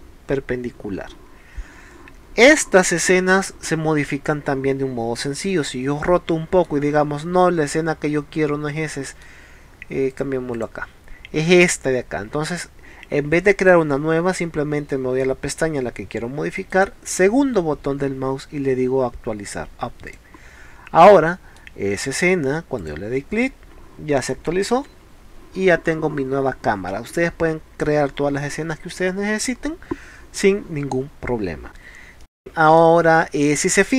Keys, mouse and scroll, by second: 5.5-6.7 middle drag, 7.3 middle click, 10.2 click, 10.6 click, 16.6-17.6 right drag, 20.1 click, 21.0-21.6 middle drag, 22.8 click, 31.7 middle click, 32.2 middle click.